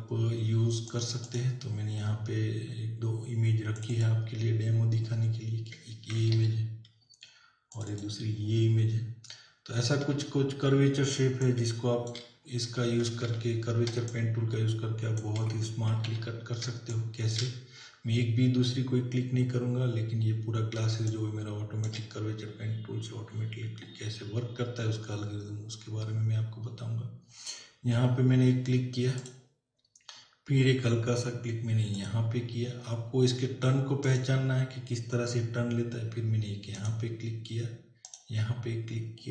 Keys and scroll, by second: 6.3 ctrl+o, 10.1 ctrl+=, 11.1 space, 13.2 ctrl+=, 14.0 space, 16.1 ctrl+-, 16.7 space, 20.9 space.